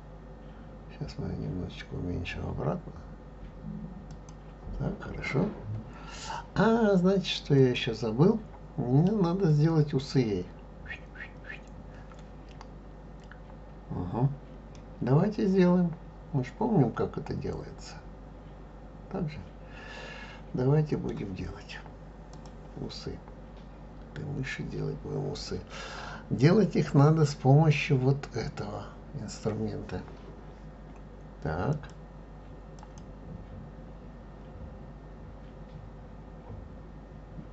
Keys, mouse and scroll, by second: 7.6 click, 14.7-17.8 middle drag, 22.3 click, 24.1-27.4 scroll up 2.